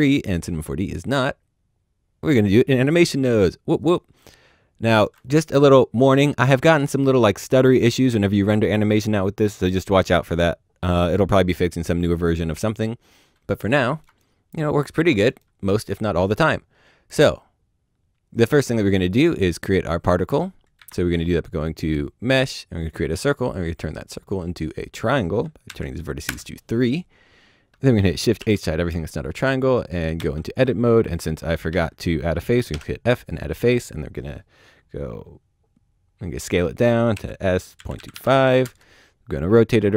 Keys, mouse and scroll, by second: 10.3 middle click, 13.2 middle click, 13.6 scroll up 1, 13.7 middle click, 19.1 click, 20.8 shift+a, 22.8 a, 22.8 click, 25.6 KP_3, 26.2 KP_Enter, 27.9 shift+z, 28.4 shift+h, 29.6 typing, 30.3 Tab, 31.5 a, 31.7 a, 32.7 f, 37.8 KP_Decimal, 38.0 KP_2, 38.1 KP_5, 38.6 KP_Enter.